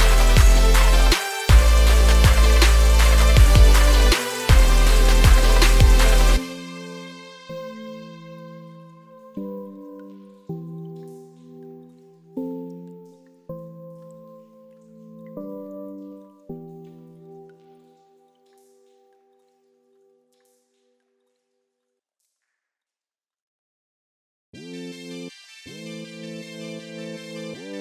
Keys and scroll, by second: 13.4 ctrl+space, 16.6 ctrl+z.